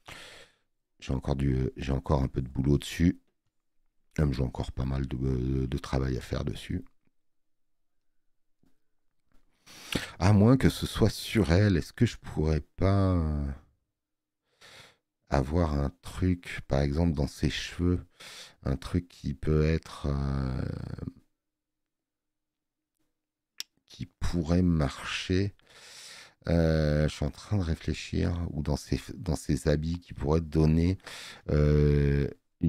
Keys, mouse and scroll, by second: 3.4 space, 4.6 click.